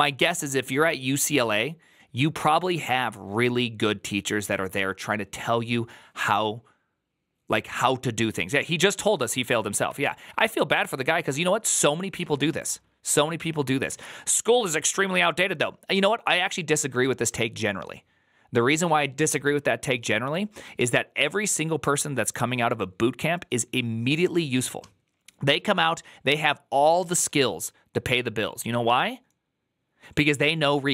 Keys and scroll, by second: 9.7 alt+[, 11.2 alt++, 13.7 alt+[, 25.0 ctrl+n, 25.0 Return.